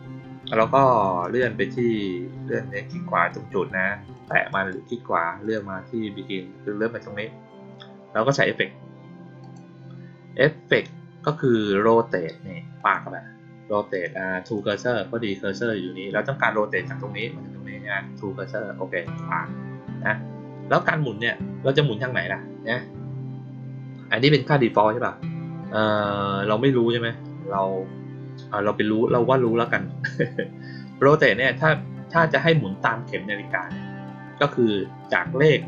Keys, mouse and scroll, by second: 0.8 click, 1.1 right click, 4.1 click, 4.4 right click, 5.3 click, 9.3 click, 12.7 click, 14.5 click, 18.9 click, 20.7-21.1 drag, 24.1 click, 24.6 click.